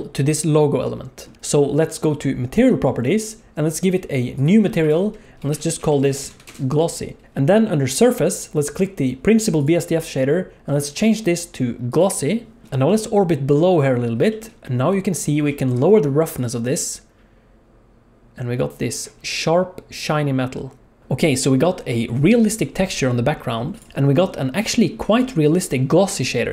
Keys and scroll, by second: 1.3 alt+a, 6.2 s, 21.0 alt+a, 21.0 ctrl+s.